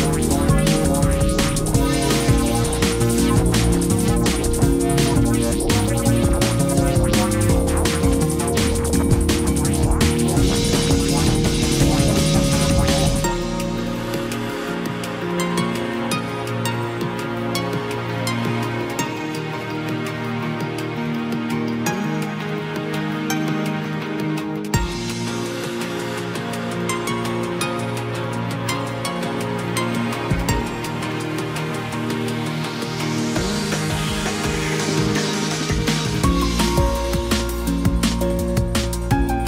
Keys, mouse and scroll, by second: 37.7 ctrl+d.